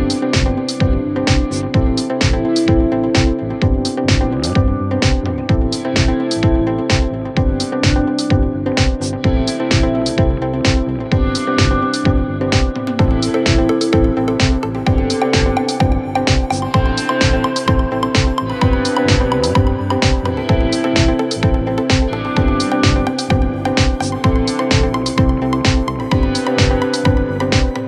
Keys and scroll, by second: 0.0-0.2 typing.